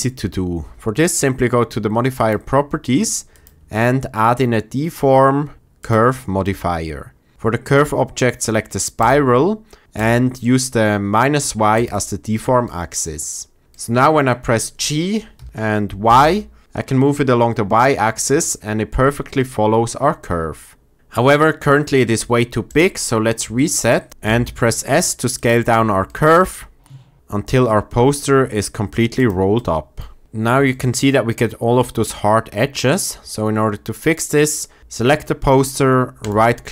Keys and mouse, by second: 3.3-5.8 drag, 7.3-9.0 drag, 10.0-11.8 drag, 11.8-15.3 middle drag, 15.3 g, 16.0 y, 24.1 ctrl+z, 24.2 s, 25.3 drag, 26.0 shift+middle click, 26.8 s, 30.6 shift+middle drag.